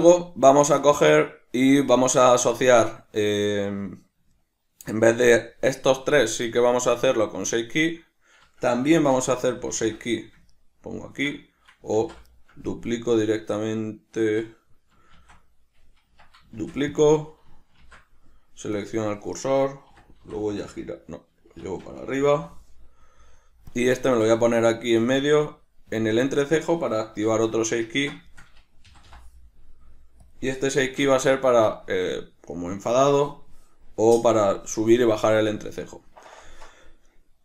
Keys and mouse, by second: 8.9 shift+c, 11.9 ctrl+z, 13.1 right click, 15.1 shift+s, 17.1 click, 17.8 shift+s, 23.8 click, 24.0-26.7 shift+middle drag, 25.9 g, 26.7 click, 27.3 alt+o, 28.0-30.3 ctrl+middle drag, 28.9 g, 30.3 click, 30.8 alt+q, 31.4-37.4 shift+middle drag.